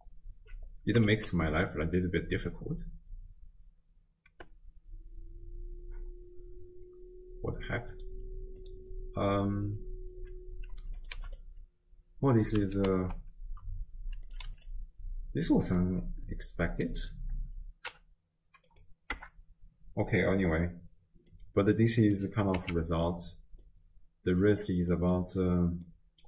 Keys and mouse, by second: 1.2 shift+space, 4.7 space, 8.0 click, 8.6 click, 11.0 click, 12.4 click, 12.9 ctrl+x, 14.3 click, 15.8-16.9 drag, 17.2-18.7 drag, 19.2 BackSpace, 21.3 click, 22.1 click, 22.6 x, 23.7 click, 24.5 click, 25.1 middle click, 25.9 middle click.